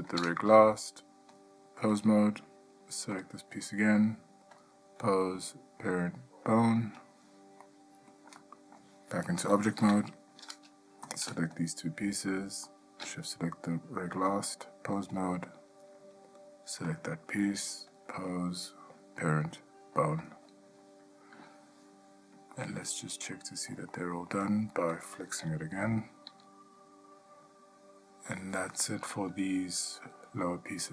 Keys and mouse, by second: 1.6-2.2 drag, 3.4 click, 4.8-7.0 drag, 7.8-8.3 middle drag, 8.6-9.0 shift+middle drag, 10.0 Tab, 14.5-15.3 drag, 18.1-20.5 drag, 22.7-23.2 ctrl+middle drag, 23.5-23.9 shift+middle drag, 24.1-24.5 middle drag, 26.5 g.